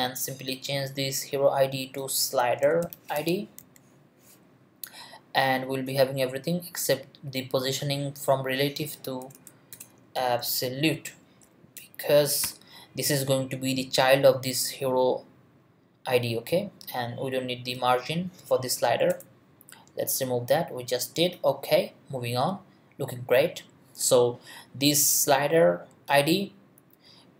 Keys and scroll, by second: 2.2-4.1 typing, 9.2 BackSpace, 10.2 shift+BackSpace, 10.4 shift+;, 10.9 shift+space, 11.4 Down, 11.7 Return, 12.4 ;, 18.8 BackSpace.